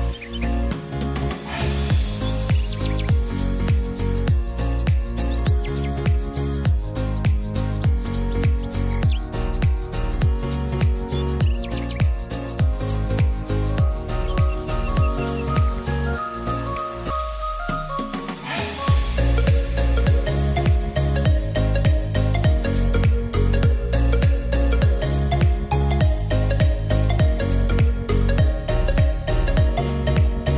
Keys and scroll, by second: 0.8 ctrl+r, 9.6 e, 22.5 ctrl+r.